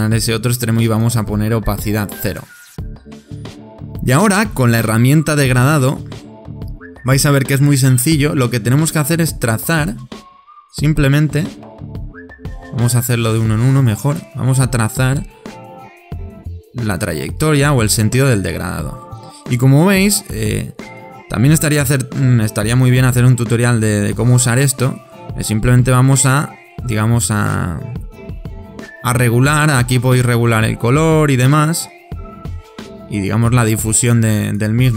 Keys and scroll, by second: 1.8 0, 2.3 Return.